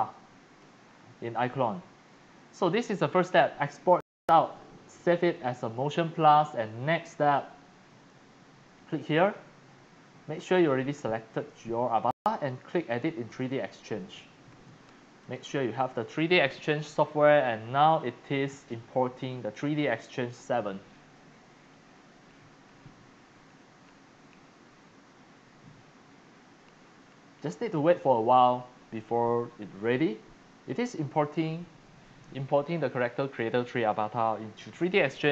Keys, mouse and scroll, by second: 0.0-1.1 typing, 0.0 click, 0.9 scroll up 1, 0.9 scroll, 1.0 scroll, 1.0 scroll, 1.8 scroll, 2.0 scroll, 3.0 middle click, 3.0-3.6 scroll down 3, 3.3 middle click, 3.5 middle click, 6.6 click, 7.0-8.2 typing, 7.1 click, 9.0 click, 10.3 click, 10.5 click, 10.7 click, 11.3 click, 11.5-12.4 scroll up 6, 12.6 scroll, 13.3 click, 15.2 click, 15.6 click, 18.3 middle click, 18.9-20.4 drag, 27.5 click, 28.3 click, 32.1 click.